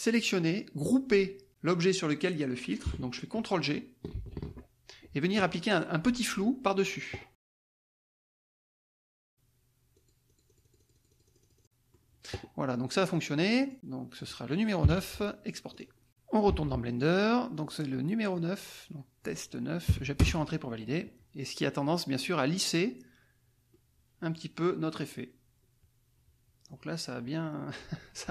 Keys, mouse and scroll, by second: 4.1 ctrl+g, 8.9 click, 9.9 click, 10.4-12.1 drag, 13.5-14.8 drag, 14.8 KP_9, 15.7 click, 16.5 alt+Tab, 17.7 click, 18.3-19.4 drag, 19.9 KP_9, 23.7-28.3 drag.